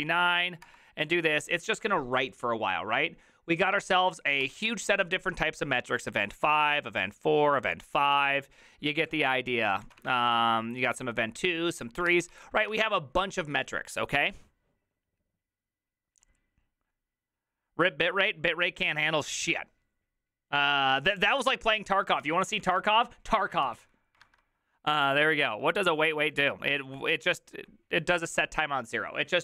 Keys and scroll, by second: 0.0-0.1 typing, 0.7 Return, 9.8 ctrl+a, 10.0 [, 10.2 ctrl+u, 10.3 ctrl+u, 12.1 ctrl+c, 12.2 ctrl+c, 22.6 alt+{, 22.6 Up, 22.8 Return, 23.6 ctrl+c.